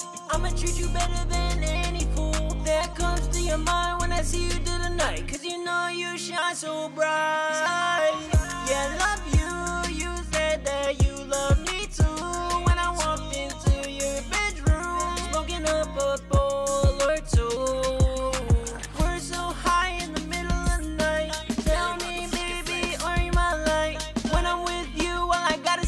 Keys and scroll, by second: 0.8 super+`, 4.1 ctrl+Page_Down, 4.5 ctrl+Page_Down, 5.3 super+s, 9.3 ctrl+shift+Page_Up, 9.5 ctrl+shift+Page_Up, 12.6 ctrl+shift+Page_Up, 12.8 ctrl+shift+Page_Up, 15.1 ctrl+shift+Page_Up, 15.3 ctrl+shift+Page_Up, 17.6 ctrl+shift+Page_Up, 17.8 ctrl+shift+Page_Up, 20.8 ctrl+shift+Page_Up, 23.0 super+s, 23.4 ctrl+shift+Page_Up, 23.8 super+s.